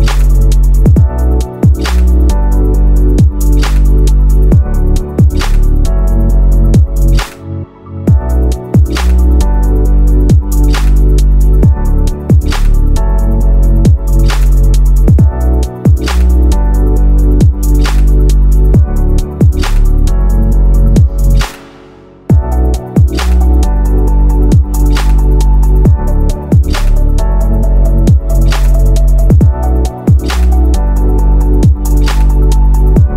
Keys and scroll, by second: 14.0 ctrl+z.